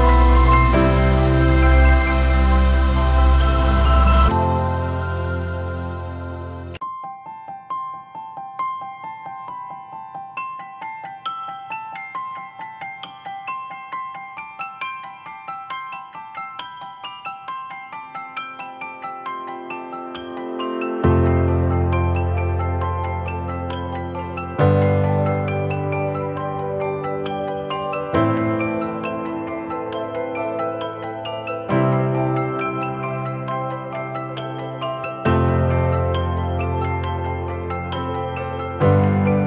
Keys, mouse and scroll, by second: 0.0-2.7 typing, 1.8 double click, 7.4 typing, 11.6-11.9 typing, 12.4 double click, 21.4 scroll up 1, 24.2 ctrl+-, 25.2-25.5 alt+scroll up 1, 30.9 alt+right click, 31.7-33.1 scroll up 1.